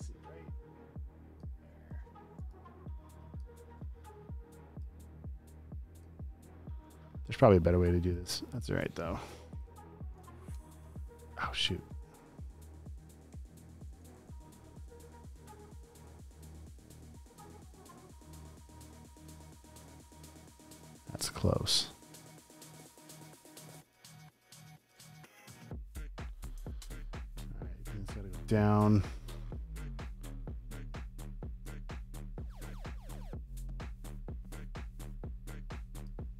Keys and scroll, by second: 2.2 space, 2.7 super+space, 9.3 shift+Left, 10.4 Return, 10.7 v, 11.9 super+d, 13.0 v, 13.3 shift+Left, 19.7 Left, 23.7 space, 24.3 super+space, 34.9 super+d.